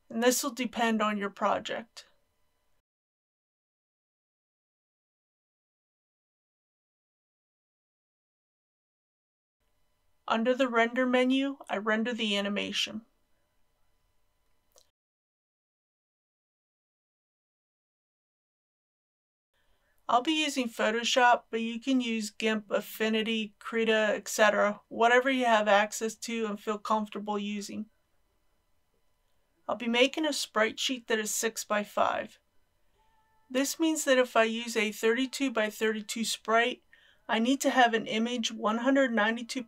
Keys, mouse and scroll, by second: 4.1 KP_7, 4.3 KP_5, 5.1 click, 6.0 KP_5, 6.1 KP_0, 6.9 click, 7.7 KP_3, 7.8 KP_0, 9.6-10.1 scroll down 1, 11.1 click.